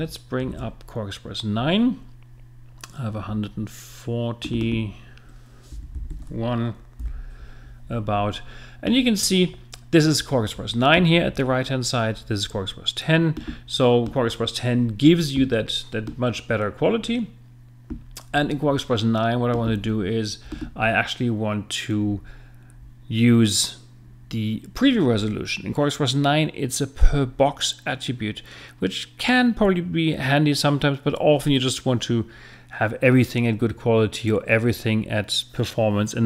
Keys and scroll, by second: 0.5 super+Tab, 5.7 l, 6.1 i, 7.0 Return.